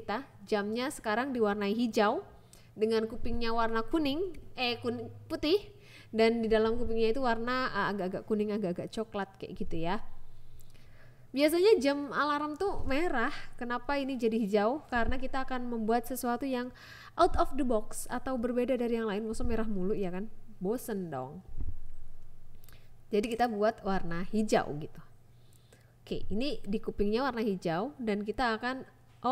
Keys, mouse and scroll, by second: 0.2 click, 2.6 a, 2.9 click, 4.1 click, 6.1 click, 6.6 click, 7.4 click, 8.0 click, 10.6 ctrl+z, 11.2 click, 13.2 click, 14.3 click, 15.4 click, 15.6 click, 16.8 click, 17.3 click, 18.2 click, 19.0 click, 21.2 click, 22.1 click, 22.8 click, 23.5 click, 24.6 click, 26.5 click, 27.6 g, 27.8 z, 29.0 click.